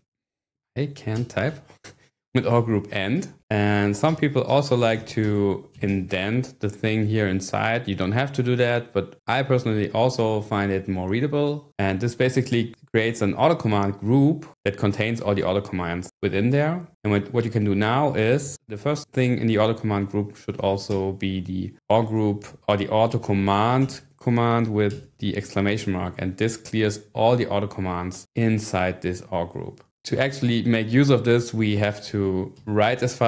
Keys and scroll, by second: 0.0-1.2 typing, 2.3-3.2 typing, 3.2 Escape, 4.0 Up, 5.0 shift+v, 5.2 Down, 5.9 shift+., 11.7 Escape, 18.5 shift+o, 20.6-23.1 typing, 24.9 shift+1, 32.2 :, 32.5 w, 32.9 Return.